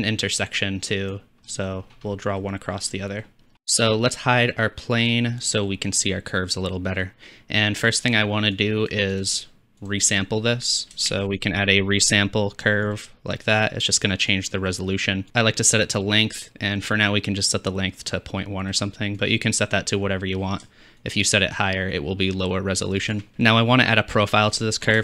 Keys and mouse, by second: 1.5-2.8 middle drag, 2.9 middle click, 3.3 click, 3.5 ctrl+z, 3.5 Tab, 5.0 click, 8.7 click, 9.8 click, 11.1 shift+a, 14.4-15.2 drag, 23.1 shift+click.